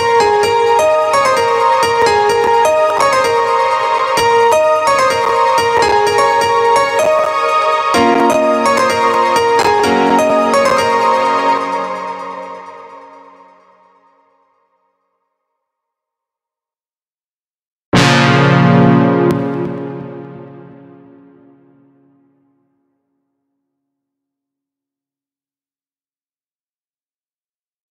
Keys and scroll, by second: 11.0 space, 18.7 space.